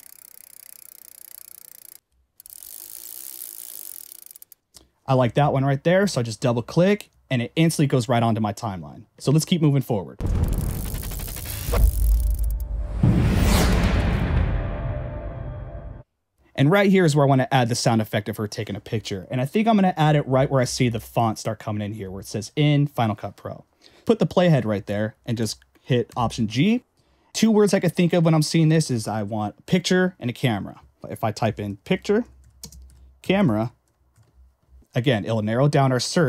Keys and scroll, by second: 7.0 Escape, 10.2 space, 16.0 space, 21.1 ,, 22.0 ..